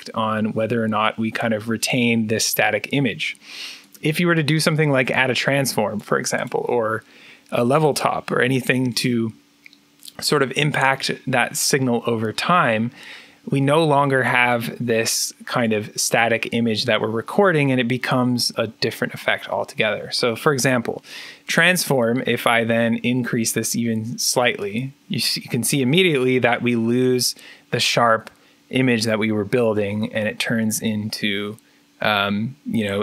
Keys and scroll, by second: 18.1 p.